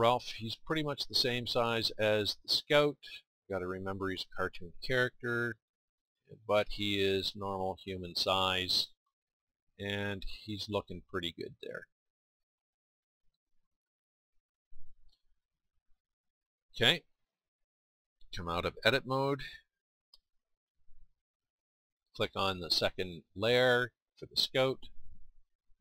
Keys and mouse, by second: 0.4-4.7 middle drag, 12.2-17.5 middle drag, 20.1 Tab, 23.4-25.8 drag.